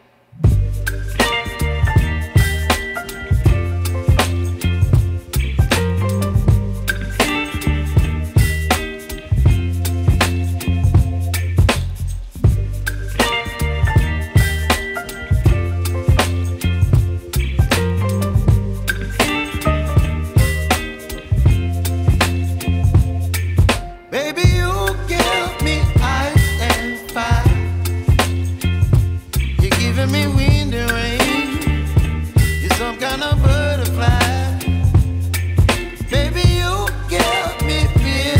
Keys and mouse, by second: 0.8 click, 6.3 click, 7.0-8.5 typing, 7.9 click, 9.1 click, 9.7 ], 12.1-16.2 typing, 12.3 click, 13.9 click, 15.7 click, 17.4-21.8 typing, 19.5 click, 19.8 click, 20.1 click, 20.8 click, 21.9 click, 23.1 z, 23.2 click, 24.8 space, 24.9 click, 25.6 space, 25.7 click, 26.9 space, 27.0 click, 30.9 ctrl+shift+click, 31.8 g, 32.6 ctrl+alt+e, 34.7 ctrl+click.